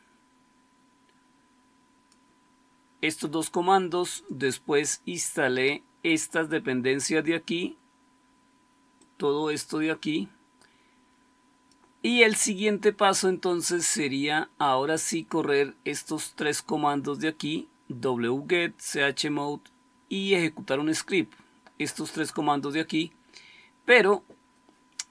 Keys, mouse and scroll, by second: 2.1-4.1 scroll down 1, 4.1-8.9 scroll down 1, 8.9-11.6 scroll down 1, 11.6-13.6 scroll down 1, 13.6-15.2 scroll down 1, 15.2 scroll down 1, 15.3-23.9 scroll up 1, 23.9-25.1 scroll up 1.